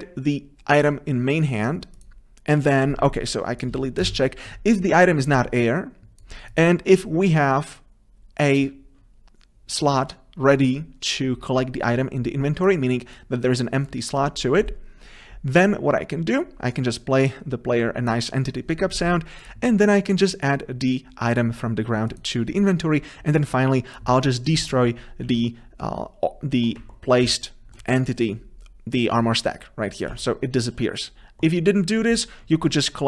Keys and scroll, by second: 4.2 Delete.